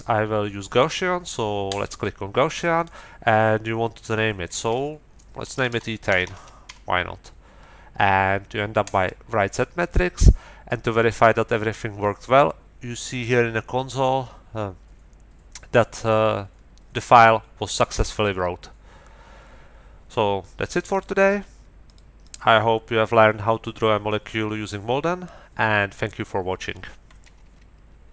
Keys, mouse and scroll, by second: 1.7 click, 2.5 click, 5.3-7.1 typing, 8.8 click, 20.9 click, 21.8 click, 22.2 middle click.